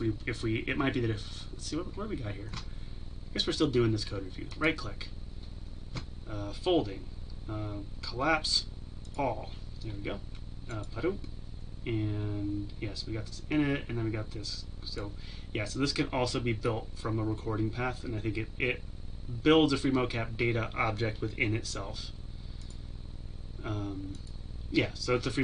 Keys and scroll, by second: 9.2 ctrl+shift+KP_Subtract.